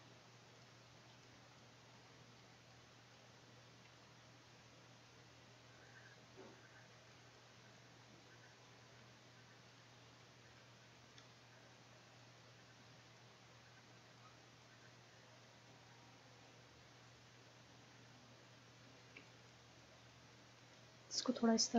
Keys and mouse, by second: 6.1 click, 6.9 middle click, 7.4-9.3 middle drag, 10.6-15.2 middle drag, 15.2 click, 15.3-18.7 middle drag, 19.3-20.9 drag, 20.9-21.7 middle drag.